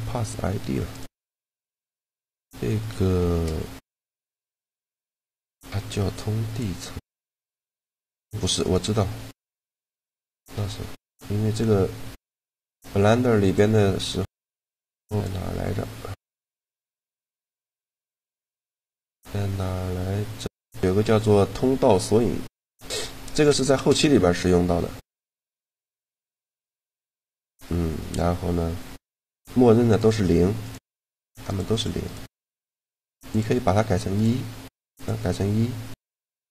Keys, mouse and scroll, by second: 0.6 right click, 1.0-2.2 middle drag, 2.4 middle click, 3.0 shift+g, 7.3 middle click, 8.3-10.0 drag, 10.0 right click, 13.2-16.5 drag, 16.6-20.1 drag, 22.2 middle click, 24.9-27.4 right drag, 29.6-33.5 right drag, 33.0-36.3 drag, 34.0-35.5 right drag, 36.1 a.